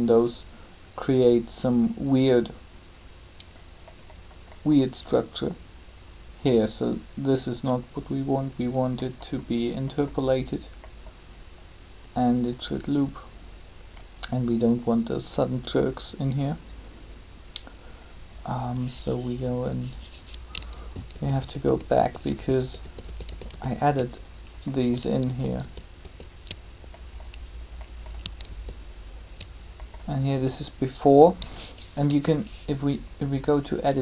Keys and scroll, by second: 20.8 ctrl+z, 25.2 ctrl+z, 28.5 ctrl+z, 32.0 Tab.